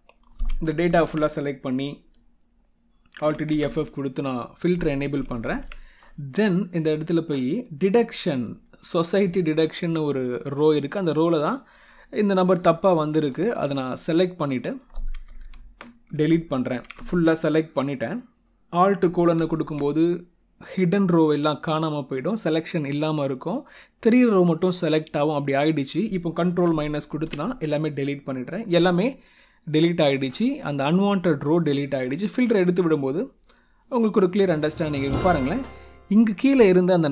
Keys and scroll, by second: 0.8 ctrl+shift+Down, 3.2 alt+d, 3.5 f, 5.2 ctrl+Up, 15.4 shift+space, 16.2 ctrl+shift+Down, 19.2 alt+;, 27.0 ctrl+-.